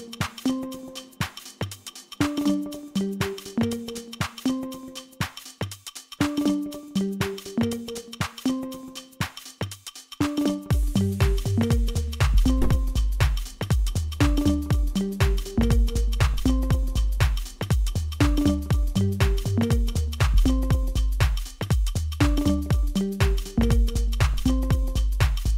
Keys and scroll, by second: 0.6 2, 2.6 Delete, 3.3 3, 13.6 3, 13.6 0, 13.7 Return, 14.5 0, 14.5 Return, 20.1 shift+Tab, 21.4 s, 23.8 ctrl+z, 24.4 Tab, 24.9 s.